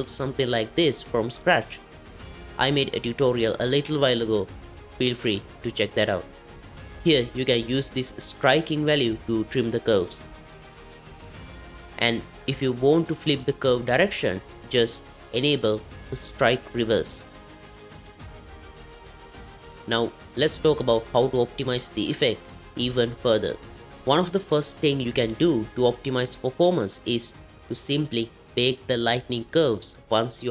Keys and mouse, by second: 2.5-4.0 shift+drag, 8.4-12.3 drag, 14.3 click, 16.2 click, 16.9 click, 17.4 click, 17.7 click, 17.9 click, 18.2 click, 18.5 click, 18.9 click, 19.7 space, 20.1 click, 26.9-30.5 drag.